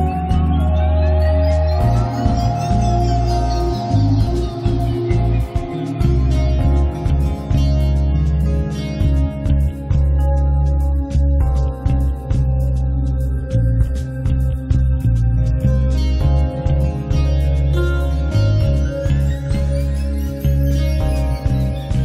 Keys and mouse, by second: 0.1 middle click, 0.6 KP_3, 0.8 z, 1.4 r, 3.4 s, 4.2 click, 4.5 right click, 4.8 middle click, 6.0 ctrl+a, 6.6 middle click, 9.2-10.3 drag, 10.5-11.9 middle drag, 11.9 ctrl+s, 12.8 click, 12.9 alt+F3, 13.7 middle click, 13.9 right click, 14.4 click, 15.0 click, 15.4 middle click, 15.4 right click, 15.7 click, 15.7 right click, 16.4-17.6 drag, 17.1 middle click, 17.1 right click, 17.9-21.6 drag, 17.9-21.0 middle drag, 17.9-20.8 right drag, 21.6 click.